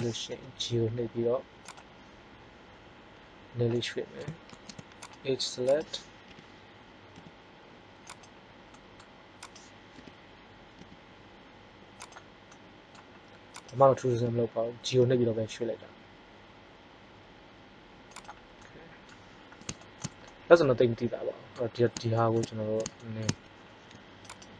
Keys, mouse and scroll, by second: 0.3 g, 4.4 ctrl+Tab, 5.6-7.4 drag, 6.2 KP_3, 7.1 g, 8.7 middle click, 9.4 click, 9.9 KP_3, 10.7 g, 12.5 middle click, 14.1 KP_3, 14.9 g, 18.3 click, 18.6 middle click, 24.2 right click.